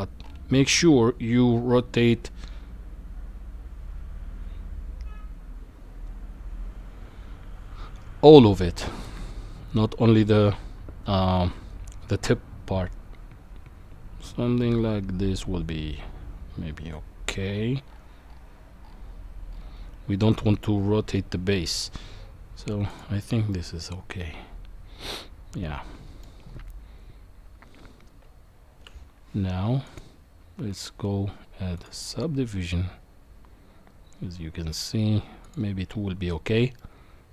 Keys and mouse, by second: 23.5-26.2 middle drag, 28.2 Tab, 30.0-33.0 drag, 35.4 click, 36.8-37.3 middle drag.